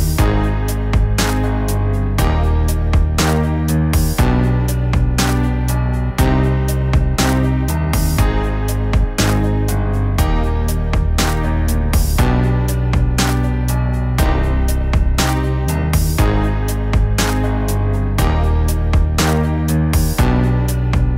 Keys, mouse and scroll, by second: 2.0 middle click, 9.6 middle click, 10.2 middle click, 10.7 middle click, 11.1 middle click, 11.7 middle click, 11.9 middle click, 12.2 middle click, 12.5 middle click, 12.8 middle click, 13.2 middle click, 13.7 middle click, 14.6 middle click, 15.2 middle click, 15.5 middle click, 15.9 middle click, 16.2 middle click, 19.5 middle click.